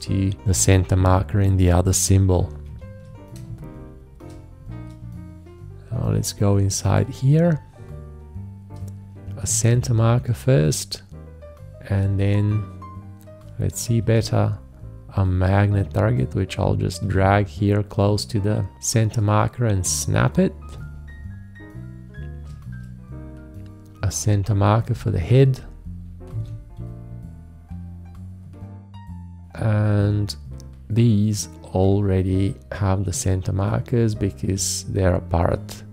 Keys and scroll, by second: 2.6 ctrl+a, 3.4 space, 9.5 alt+`, 14.0 shift+`, 20.7 space, 26.3 alt+`.